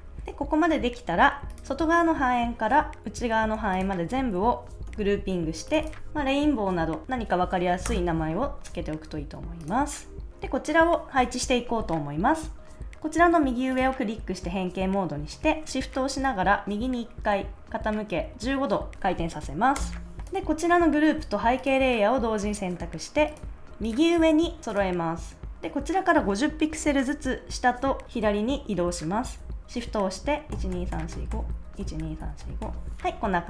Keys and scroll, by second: 4.8 super+g, 7.8 Return, 19.7 Return, 25.5 super+z, 30.5 shift+Left, 31.7 shift+Down.